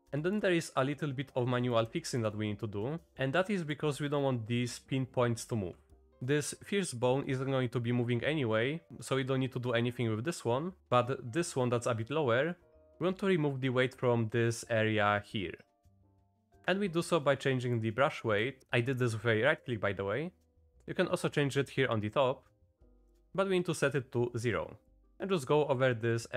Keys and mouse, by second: 0.0 Down, 0.0 Up, 0.0 click, 0.3 shift+click, 0.5-1.8 drag, 2.0 shift+click, 2.3 click, 10.8 click, 16.5-20.9 drag, 23.1 middle click, 24.9 middle click, 25.1-26.3 drag.